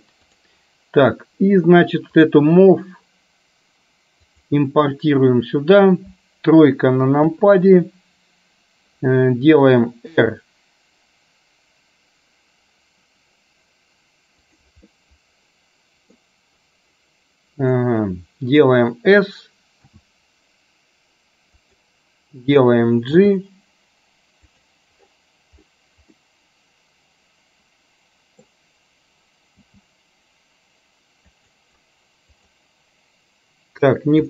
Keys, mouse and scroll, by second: 7.3 KP_3, 10.2 r, 15.0-16.3 middle drag, 17.8-18.8 middle drag, 19.9 s, 23.3 g, 26.2-28.5 middle drag, 29.7 g, 32.3 click.